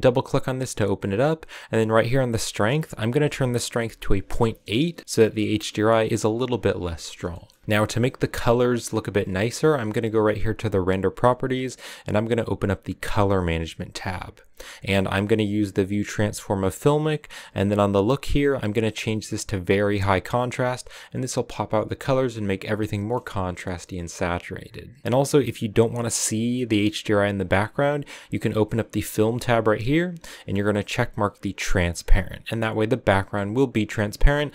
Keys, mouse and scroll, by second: 0.0 click, 2.5-5.0 drag, 5.0 KP_0, 7.2-19.7 shift+middle drag, 19.7-22.9 drag, 22.9 shift+middle click, 23.3-24.9 scroll up 1, 31.6-32.7 drag.